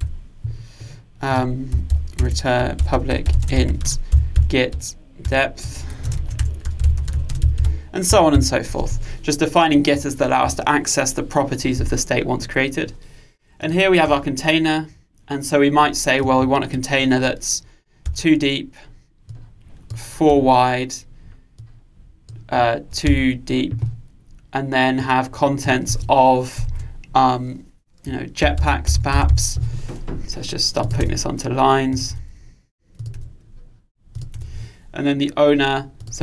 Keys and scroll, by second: 3.4 Return, 5.3 Return.